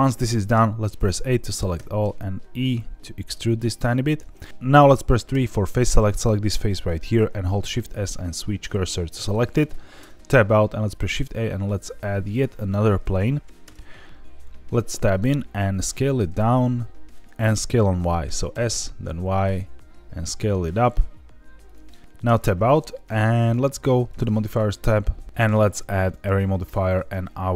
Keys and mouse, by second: 0.5 a, 0.9 middle click, 1.7 e, 4.0 click, 4.4 middle click, 5.3 3, 5.7 click, 7.5 shift+s, 9.9 Tab, 10.8 shift+a, 13.7 Tab, 15.4 s, 17.1 click, 17.5 s, 18.5 y, 21.6 click, 22.2 Tab, 23.7 click, 24.5-26.1 drag.